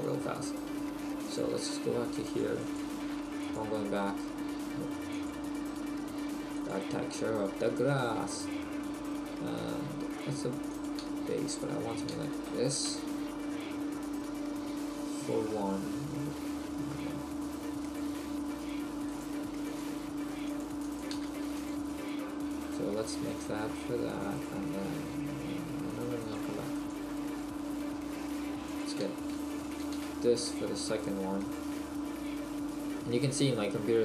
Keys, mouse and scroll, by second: 20.5 click.